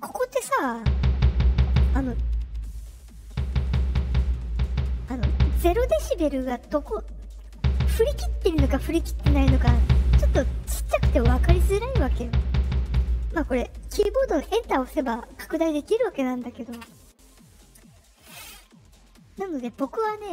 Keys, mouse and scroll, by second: 16.7 Return, 20.2 click.